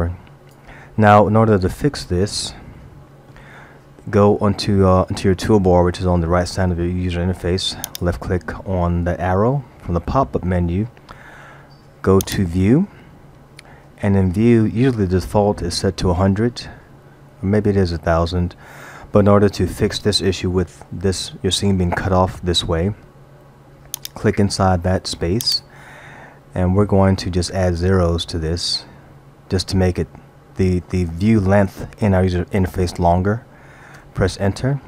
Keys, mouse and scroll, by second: 2.7 shift+middle click, 7.9 click, 12.3 click, 24.0 click, 27.0 BackSpace, 28.4 0, 28.7 0, 28.8 0.